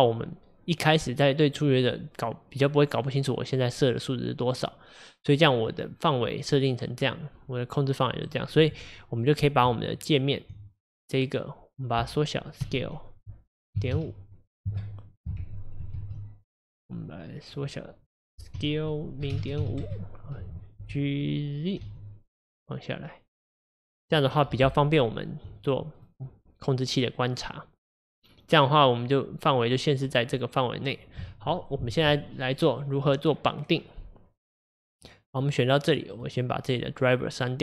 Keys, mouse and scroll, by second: 8.7 Tab, 9.3 click, 10.5 Tab, 11.1 click, 12.6 s, 16.0 ctrl+z, 18.6 s, 20.8 g, 25.6 Left, 26.0 Left, 31.5 Left, 34.9 click.